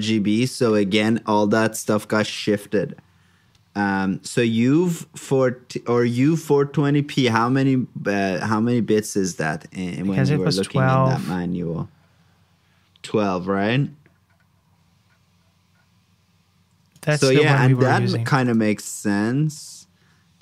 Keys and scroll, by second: 10.7 super+j, 17.7 super+c.